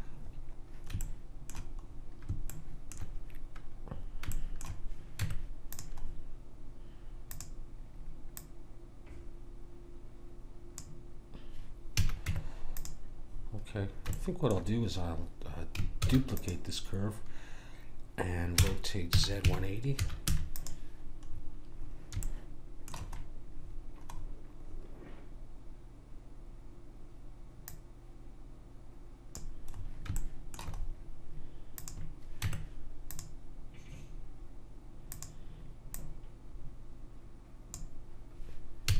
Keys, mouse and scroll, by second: 0.3-1.0 scroll up 1, 5.2 Tab, 7.3 click, 11.9 a, 12.2 Tab, 13.4 middle click, 14.3-16.0 middle drag, 16.0 shift+d, 18.5 r, 22.1-24.2 middle drag, 24.2-26.2 scroll up 1, 26.2-27.6 scroll down 1, 27.6 click, 29.7-31.2 middle drag, 31.8 click, 32.4 Tab, 35.1 click, 38.8 a.